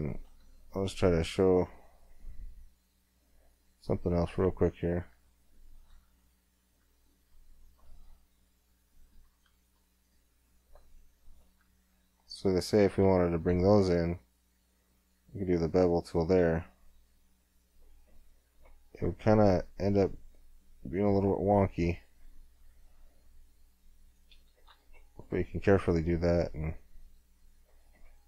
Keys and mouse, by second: 0.7 middle click, 1.0 right click, 1.0 middle click, 1.3 right click, 1.7 middle click, 3.7 click, 4.6-5.6 middle drag, 5.6-7.0 right drag, 7.0 middle click, 7.1 click, 7.6 middle click, 8.8 middle click, 10.2-15.2 middle drag, 13.4 w, 18.0 middle click, 18.8-20.2 middle drag, 20.9 middle click, 24.7 Tab, 25.2 middle click, 25.7 middle click, 25.9 click, 26.1 click, 26.3 click, 27.5-28.2 drag.